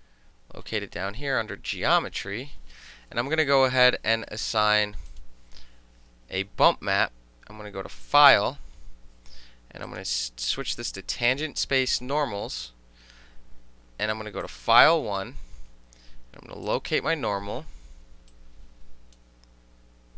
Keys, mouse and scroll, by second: 5.2 click, 8.1 click, 9.9 click, 12.0 click, 14.5 click, 14.6-16.7 middle drag, 16.7 click, 16.8-17.9 middle drag, 18.4-19.2 drag.